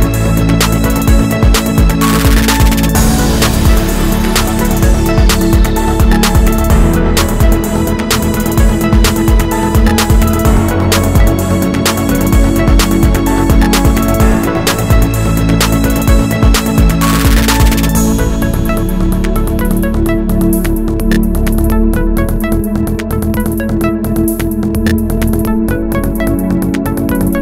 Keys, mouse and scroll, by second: 0.1 ctrl+s, 3.1 click, 3.3 Tab, 3.5 middle click, 3.7 2, 3.9 click, 4.2-5.5 middle drag, 5.5 click, 6.0 g, 6.9 click, 6.9-12.7 middle drag, 8.2 KP_3, 8.8-9.5 scroll up 2, 9.5 g, 12.7 shift+click, 12.8-14.5 middle drag, 13.1 scroll down 1, 13.3-13.6 scroll up 1, 13.6 scroll down 1, 14.5 shift+click, 15.2 s, 15.9 KP_Enter, 16.1 Tab, 16.3-17.6 middle drag, 16.4 scroll down 2, 17.6 click, 17.8 Tab, 18.0 click, 18.5 shift+d, 18.7 Return, 19.5 click, 20.0-20.5 scroll up 2, 20.1-26.9 shift+middle drag, 21.2 Tab, 22.2-22.6 scroll down 1, 22.6-23.0 scroll up 1, 23.0 ctrl+r, 25.0 Escape, 26.9 click.